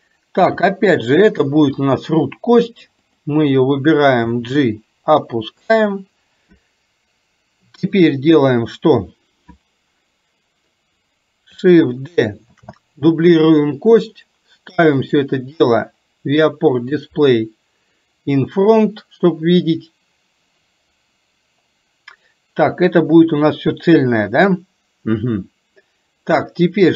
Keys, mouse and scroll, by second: 0.6 g, 3.3 click, 4.3 g, 12.6 shift+d, 15.0 click, 17.0 click.